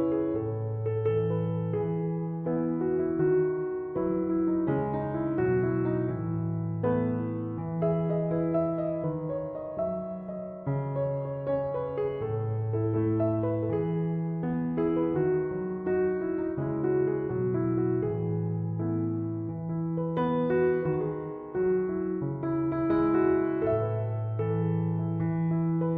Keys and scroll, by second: 18.1-19.3 typing.